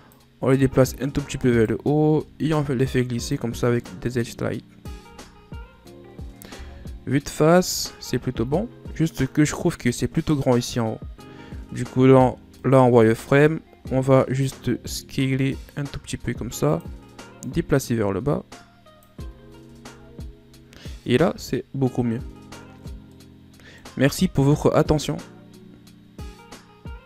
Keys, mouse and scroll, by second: 1.1 alt+right click, 2.1 ctrl+e, 4.6 Tab, 4.9-5.5 scroll down 7, 6.2 KP_1, 7.1-7.9 scroll down 6, 7.9-8.2 scroll up 8, 11.0 Tab, 11.4 z, 12.2 right click, 12.6 b, 14.4 scroll up 2, 14.9 s, 17.0-18.7 drag, 18.7 z, 19.1-19.9 scroll down 5, 19.5 Tab, 21.4-22.6 scroll down 4, 22.7 scroll down 4, 22.8-25.8 middle drag.